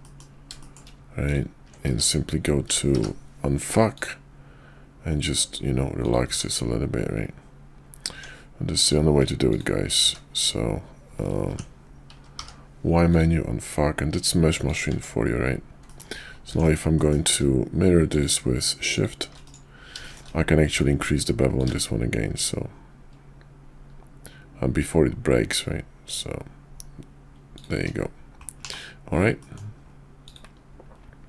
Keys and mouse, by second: 0.0 middle click, 0.6 shift+middle click, 1.2 ctrl+click, 1.8 q, 2.9 y, 6.3 Tab, 9.4 click, 10.0 q, 11.8 y, 12.4 y, 14.9 Tab, 15.8 middle click, 16.5 alt+x, 17.0 middle click, 18.1 click, 18.9 click, 20.0 shift+middle click, 20.6 q, 29.4 middle drag.